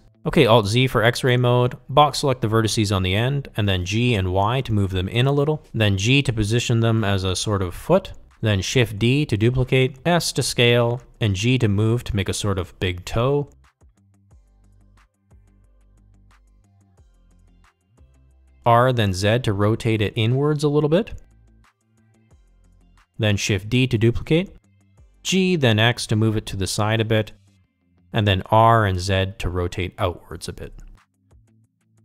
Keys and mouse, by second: 1.2 alt+z, 2.0 click, 3.7 g, 7.2 Tab, 9.2 KP_3, 9.9 shift+d, 11.9 s, 12.8 ctrl+z, 14.3 Tab, 15.0 a, 16.7 s, 19.3 g, 19.4 ctrl+z, 19.4 middle click, 20.5 r, 25.4 shift+d, 27.2 r, 28.2 ctrl+z, 29.0 r, 31.0 s.